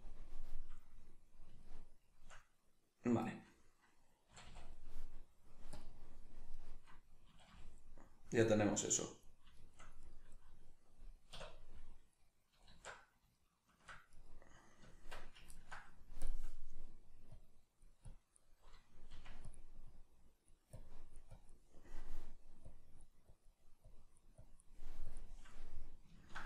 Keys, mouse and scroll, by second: 4.3 a, 5.7-6.5 drag, 6.5 right click, 7.3 a, 7.8-10.0 middle drag, 10.0 right click, 11.4 \, 12.7 alt+q, 13.4-14.2 shift+middle drag, 14.2 right click, 14.8 Tab, 15.6 ctrl+middle click, 16.2-19.6 drag, 19.2 f, 25.7-26.4 middle drag.